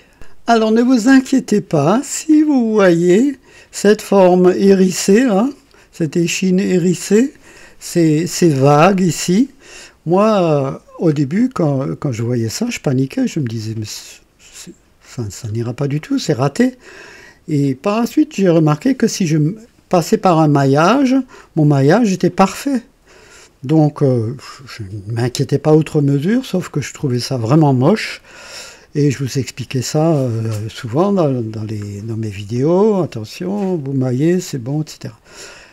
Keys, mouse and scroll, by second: 0.1 click, 1.2-1.6 scroll up 2, 2.0 click, 3.2 right click, 3.9-6.0 drag, 7.0-8.4 drag, 9.8 scroll down 2, 10.8-11.2 scroll down 2, 11.4 click, 12.5-13.0 scroll up 1, 13.0 right click, 13.3-15.3 drag, 15.4-15.8 scroll up 2, 16.0 right click, 16.8 scroll down 1, 17.7-18.8 drag, 21.4 scroll up 2, 23.9-26.2 drag, 26.5 scroll down 2, 28.8-30.2 drag, 31.5 scroll down 2.